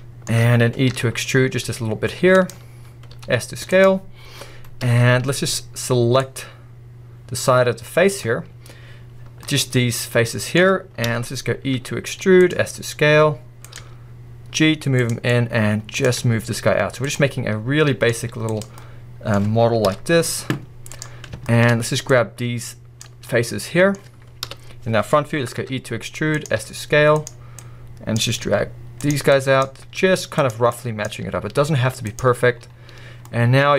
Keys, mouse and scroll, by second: 0.9 e, 3.1 s, 8.2-9.4 drag, 9.4-10.5 middle drag, 11.1 KP_1, 11.7 e, 12.5 click, 12.6 s, 13.8 click, 13.8 g, 16.1 click, 16.2 g, 17.3 scroll, 17.3 middle click, 18.2 z, 18.8-19.3 middle drag, 23.0 click, 23.2-23.6 middle drag, 23.9 scroll up 1, 24.5 KP_1, 25.1-25.6 scroll up 1, 25.6 e, 26.6 s, 28.2 right click, 28.2 click, 28.5 g, 29.6 right click, 29.6 click, 29.8 g, 31.1 click, 31.2 g, 33.2 middle click.